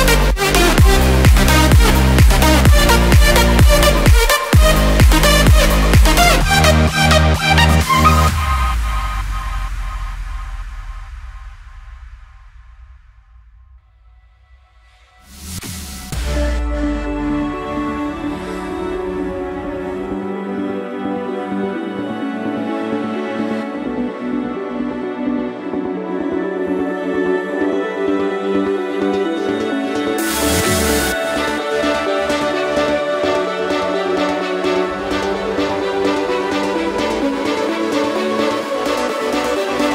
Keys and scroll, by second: 0.1 ctrl+d, 0.5 ctrl+j, 0.7 ctrl+e, 1.8 ctrl+j.